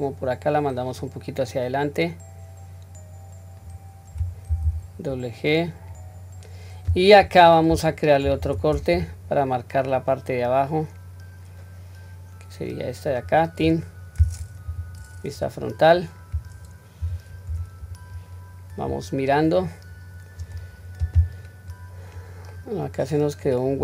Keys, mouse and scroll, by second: 13.7-14.4 scroll down 1, 14.6 scroll down 1, 14.6 KP_1, 15.4-16.0 scroll up 1, 16.0-16.4 scroll down 1, 17.0 q, 17.5 Tab, 18.1-18.9 scroll down 4, 18.9-19.6 scroll up 1, 20.5-21.4 scroll up 3, 21.9 scroll down 1, 22.5-23.4 middle drag.